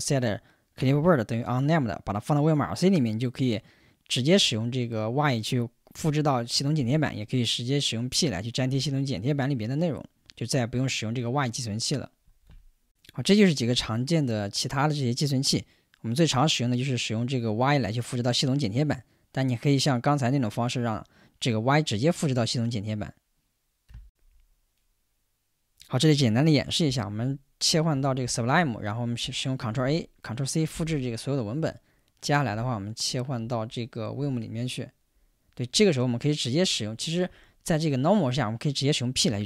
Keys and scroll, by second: 24.1 shift+super+2, 27.0 super+Tab, 29.7 super+a, 37.0 Escape, 39.1 p.